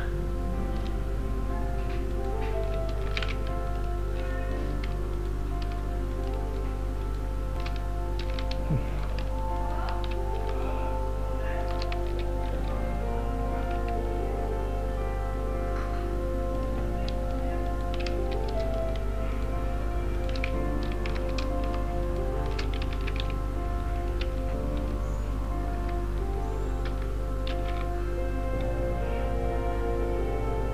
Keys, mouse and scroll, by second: 0.0 alt+right click, 2.2 alt+shift+right click, 3.2 ctrl+Tab, 4.5 alt+right click, 5.2 alt+shift+right click, 7.8 scroll up 2, 8.3 z, 9.0 right click, 9.6 alt+shift+right click, 11.0 right click, 12.1 z, 12.4-13.4 scroll down 6, 13.9 s, 16.8 scroll up 2, 17.3-17.8 scroll up 2, 17.8 alt+right click, 18.2 z, 19.4 alt+shift+right click, 21.3 ctrl+z, 22.1 alt+shift+right click, 23.0 s, 24.2 z, 24.6-25.2 scroll down 7, 25.4 scroll up 2, 25.8 Tab, 27.7 g.